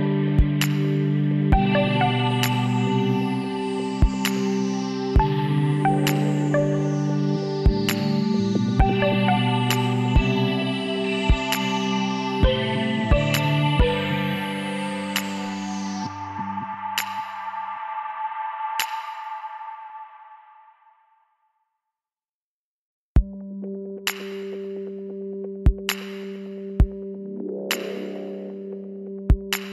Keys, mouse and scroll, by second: 0.9-1.9 middle drag, 1.9 KP_1, 2.1 middle click, 4.7 g, 10.3-11.5 middle drag, 11.5-13.1 drag, 12.2 middle click, 13.1 b, 13.3 right click, 14.5 z, 15.6 b, 16.9-18.7 drag, 19.0-20.4 middle drag, 20.4-22.1 drag, 22.1 middle click, 22.5-25.5 middle drag, 26.4 right click, 26.4 b, 27.8-29.6 drag.